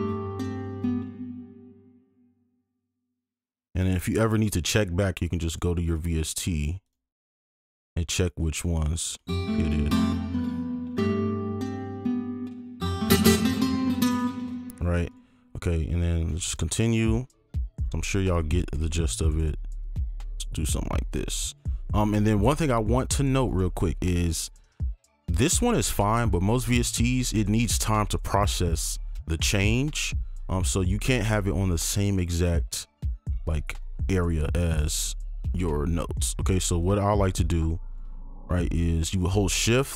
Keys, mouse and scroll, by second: 0.7 click, 1.0 ctrl+space, 1.6-2.5 alt+scroll up 2, 2.0 right click, 2.5 ctrl+click, 6.8 double click, 9.2 space, 12.4 space, 13.2 double click, 15.1 right click, 15.7 ctrl+click, 16.1 ctrl+click, 18.6 ctrl+click, 19.8 shift+click, 22.5-25.1 scroll up 1, 27.1-27.4 scroll up 1, 27.4-28.7 scroll down 1, 28.7-30.2 scroll, 30.2-32.0 scroll up 1, 32.0 scroll, 32.1 ctrl+click, 34.3-35.3 scroll down 1, 35.9 scroll down 1, 36.8 ctrl+click, 39.5-39.9 scroll.